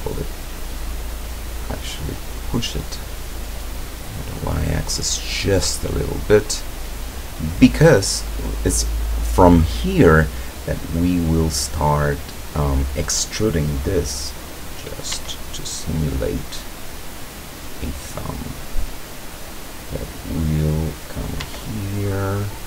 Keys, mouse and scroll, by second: 2.9 scroll up 1, 3.5 scroll down 1, 3.9-6.0 middle drag, 15.2 e, 21.2 click, 21.5 e.